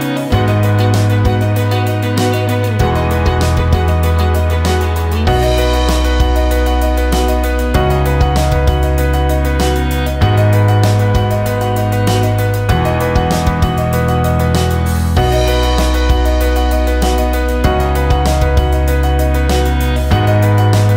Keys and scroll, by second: 20.5 ctrl+z.